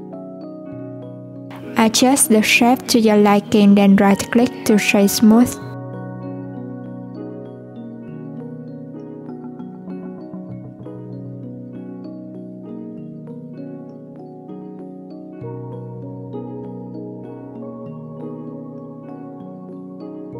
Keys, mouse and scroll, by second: 0.8 alt+z, 1.3 click, 3.2 click, 5.8 Tab, 7.0 Tab, 7.5 click, 9.1 click, 11.5 Tab, 13.2 Tab, 13.9 alt+click, 14.5 alt+click, 15.2 ctrl+r, 17.7-18.5 middle drag, 18.5 alt+z, 19.1-20.3 middle drag.